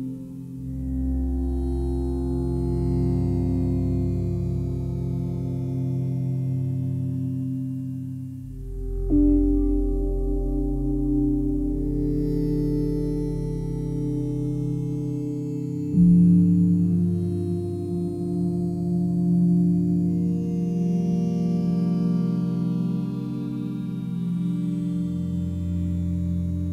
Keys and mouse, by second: 0.0 click, 0.7 click, 2.2 click, 3.4 click, 3.6 click, 4.5 r, 4.9 z, 6.0 click, 8.6 click, 10.0 click, 10.7 click, 11.7 click, 13.0 g, 13.5 x, 14.7 click, 15.9 click, 17.4 r, 17.8 z, 18.5 click, 19.3 g, 20.3 click, 21.3 click, 23.0 g, 24.1 click, 25.5 click.